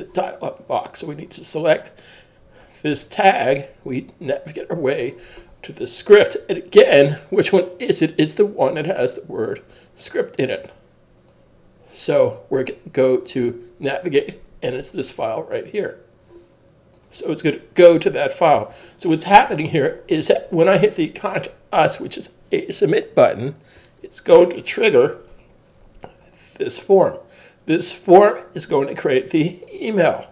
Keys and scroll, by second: 18.5 super+s.